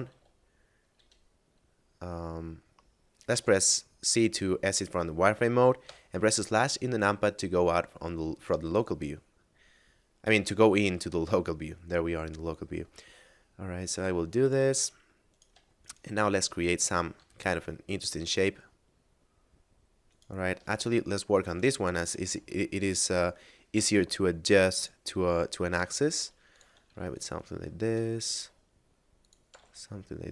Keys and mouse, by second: 0.0 middle click, 0.2 z, 0.6 middle click, 0.8 z, 3.2 z, 5.6 KP_Divide, 7.2 middle click, 9.7 middle click, 13.0 middle click, 13.9 s, 14.3 click, 14.8 middle click, 15.3 right click, 15.8 shift+right click, 16.2 middle click, 17.2 e, 20.0 right click, 20.6 ctrl+z, 21.0 middle click, 21.4 right click, 21.8 shift+right click, 22.3 e, 23.8 y, 24.8 click, 25.2 s, 26.5 click, 26.8 ctrl+r, 27.0 click, 27.3 right click, 27.9 s, 29.1 click, 29.6 g, 29.6 z.